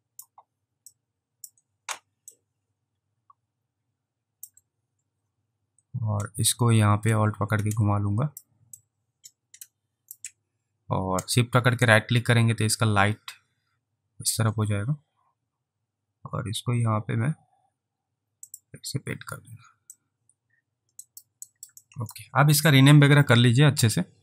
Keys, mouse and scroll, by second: 1.0 ctrl+click, 2.5 ctrl+click, 7.3 alt+click, 8.9 alt+click, 11.9 right click, 18.5 click, 20.0 alt+click, 21.1 alt+right click, 21.6 alt+right click, 21.9 alt+click.